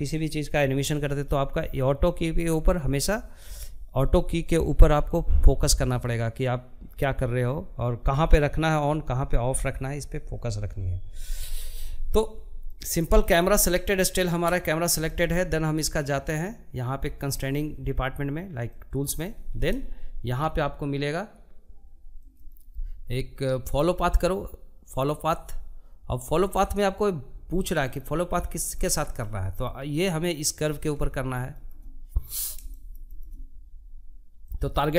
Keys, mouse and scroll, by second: 11.4-23.9 middle drag, 26.6 scroll down 4, 26.9 scroll up 1, 27.0-27.8 scroll down 4, 27.9-34.9 middle drag.